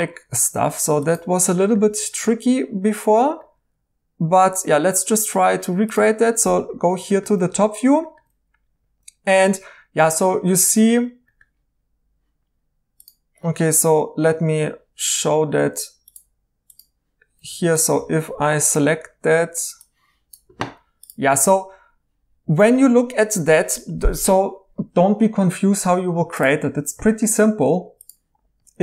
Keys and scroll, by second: 1.8 e, 17.5 Tab, 18.7 m.